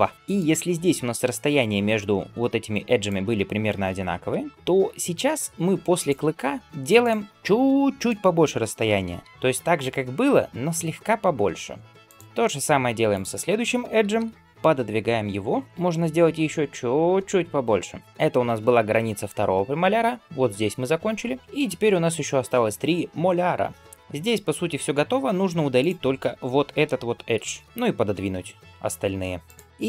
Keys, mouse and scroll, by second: 0.1-1.5 middle drag, 0.1-1.0 scroll down 1, 2.2 alt+click, 2.9 alt+click, 7.5-8.9 middle drag, 8.9 g, 12.2 shift+middle click, 12.9 alt+click, 13.8 g, 25.6 alt+click, 27.2 ctrl+x, 27.6 alt+click, 28.0 g.